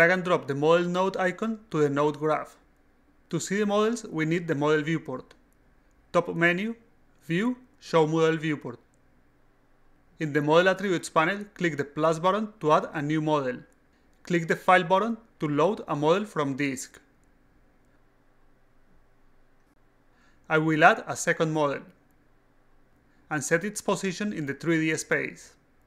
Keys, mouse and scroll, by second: 0.5-1.8 drag, 7.2 click, 8.1 click, 8.8-9.2 drag, 9.6 click, 11.8 click, 15.0 click, 17.5 click, 17.6 click, 18.4-18.9 alt+right drag, 18.9-19.4 alt+drag, 19.5 alt+right click, 21.0 click, 21.8 click, 22.8 click, 23.0 click, 24.6 click, 25.6 click.